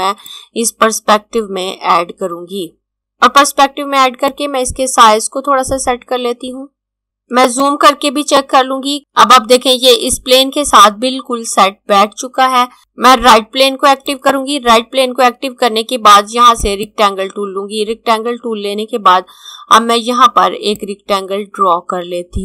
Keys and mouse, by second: 4.4 click, 7.4 click, 12.8 click, 16.5 click, 20.5 click.